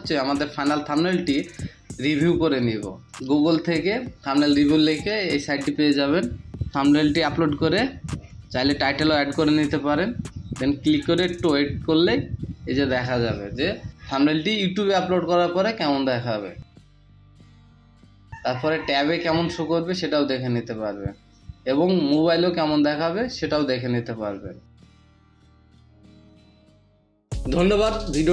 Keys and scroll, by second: 9.9 super+v, 10.8 ctrl+v, 10.9 ctrl+v, 11.3 Delete.